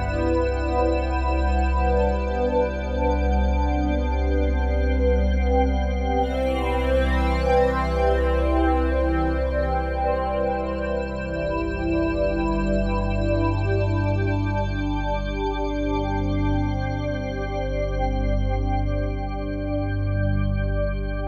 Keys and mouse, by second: 1.3 click, 2.1 typing, 2.8 click, 4.1 ctrl+z, 5.5 i, 6.7-7.5 drag, 7.8-8.8 drag, 8.0 typing, 9.0 typing, 10.1 click, 11.0 typing, 11.6-13.2 drag, 13.3 typing, 13.8 click, 14.4 typing, 14.8 click, 15.4 click, 16.3 typing, 17.0 click, 17.6 typing, 17.9 click, 18.6 typing.